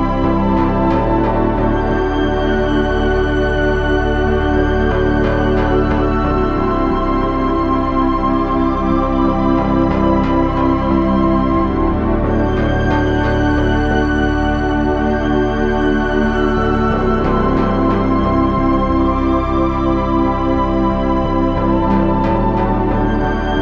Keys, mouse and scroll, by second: 3.8 ctrl+z, 4.6 KP_0, 5.7 KP_0, 7.4 o, 8.3 s.